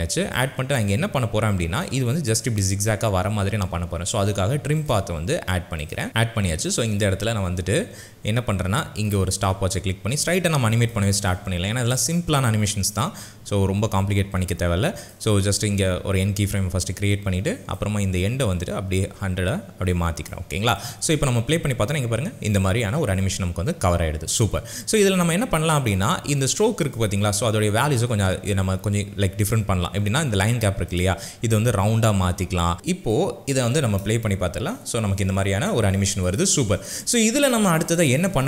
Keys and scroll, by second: 21.1 space, 32.7 Return, 33.7 space.